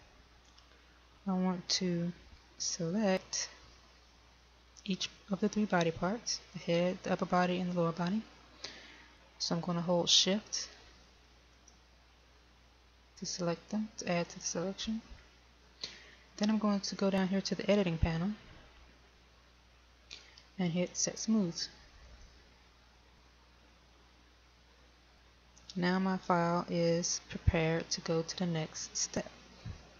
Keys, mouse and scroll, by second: 0.9 right click, 4.8 right click, 12.8 shift+right click, 15.5 shift+right click, 25.7 click.